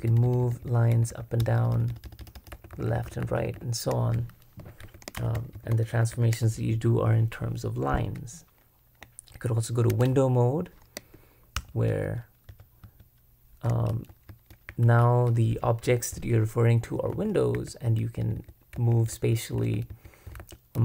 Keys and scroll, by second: 2.3-6.4 typing, 9.9 super+w, 11.6 |, 12.8-20.1 typing.